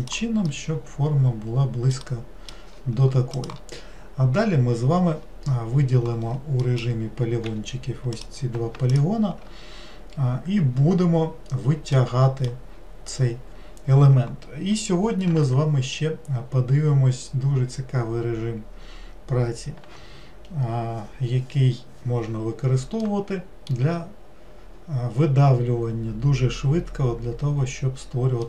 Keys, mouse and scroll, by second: 0.5-5.2 middle drag, 6.7 middle click, 7.5 3, 8.2 click, 8.9 shift+click, 12.0-13.0 middle drag, 13.0-16.5 scroll down 2, 23.1-26.2 middle drag.